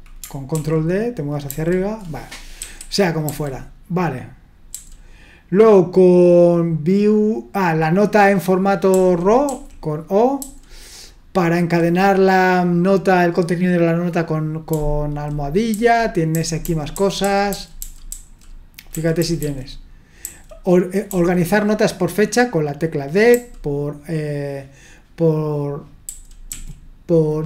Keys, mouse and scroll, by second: 0.6 ctrl+d, 1.5 ctrl+u, 2.6-4.7 typing, 8.9-10.4 typing, 14.7 j, 15.7-21.1 typing, 23.3 j, 26.1 j, 26.5 k.